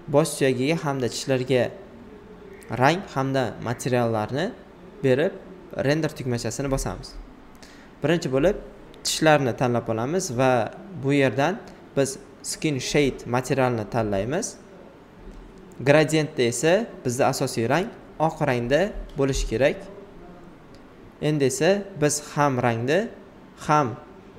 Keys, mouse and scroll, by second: 0.2 alt+right click, 1.2 alt+click, 1.9 alt+right click, 3.3 alt+right click, 6.0 alt+right click, 8.7 alt+right click, 10.9 click, 13.6 alt+right click, 14.5 alt+right click, 15.8 alt+right click, 16.4-17.8 alt+right drag, 17.8 click, 20.5 ctrl+d, 21.3 alt+right click, 22.7 click, 23.3 alt+right click.